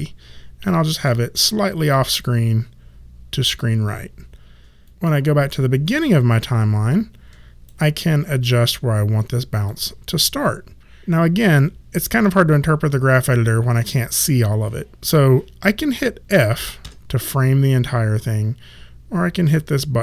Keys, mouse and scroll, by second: 4.8 click, 9.1 click, 16.8 f.